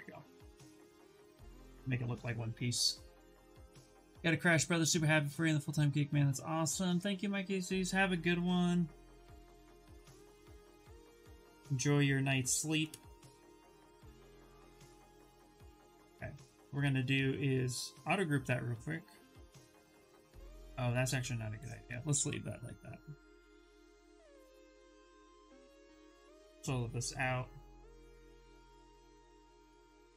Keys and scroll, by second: 13.8 shift+f, 15.2 2, 20.7 ctrl+z, 30.0 ctrl+w.